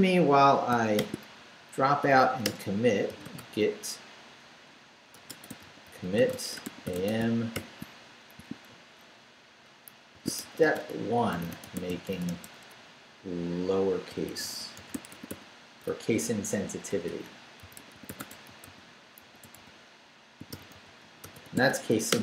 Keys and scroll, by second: 1.0-7.5 typing, 2.4 Return, 9.9-15.9 typing, 17.4-22.2 typing.